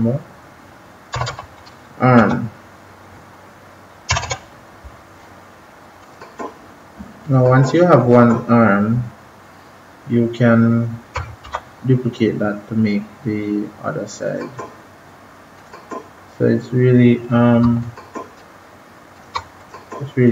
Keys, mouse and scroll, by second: 1.0 BackSpace, 2.1 typing, 5.9 click, 11.4 ctrl+-, 14.1 click, 17.7 shift+click, 19.5 click.